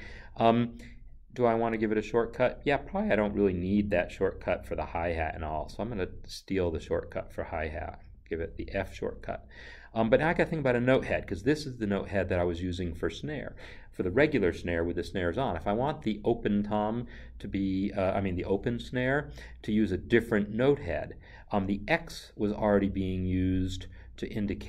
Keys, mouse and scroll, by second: 6.9 click.